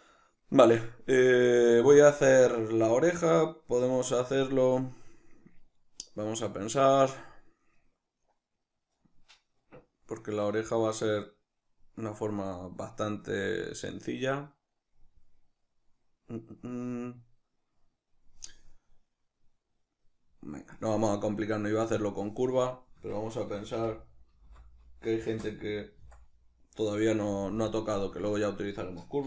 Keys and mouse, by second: 23.0 Tab, 23.7 r, 25.4 middle click, 25.4 Return, 26.0 s, 27.1 click, 27.3 g, 27.8 click, 28.0 s, 28.8 right click.